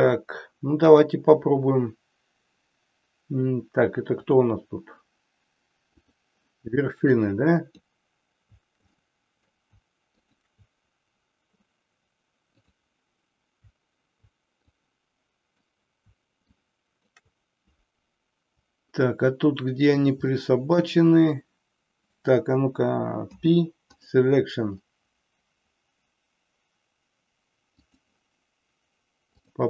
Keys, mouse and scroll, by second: 1.0 click, 4.1 click, 7.2 click, 9.0 middle click, 10.2 shift+click, 12.7 click, 14.7 click, 16.6 shift+click, 20.5 middle click, 23.2 p, 27.7 click, 29.5 click.